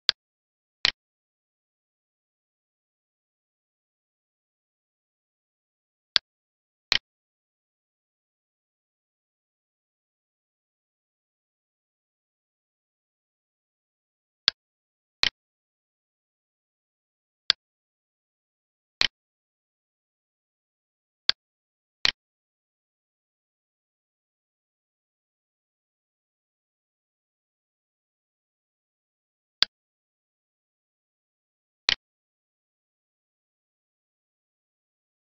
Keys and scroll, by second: 22.2 Up, 22.9 Up, 23.8 Down, 24.9 Down, 25.5 Down.